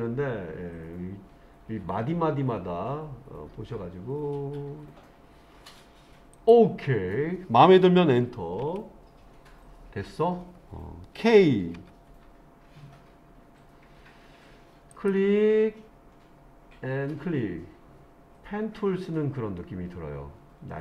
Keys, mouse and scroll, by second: 11.8 k.